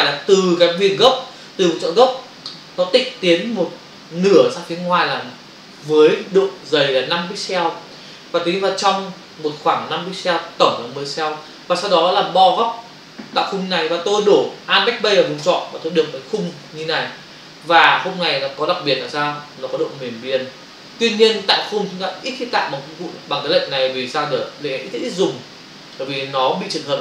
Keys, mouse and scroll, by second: 15.4 alt+BackSpace, 17.8 click.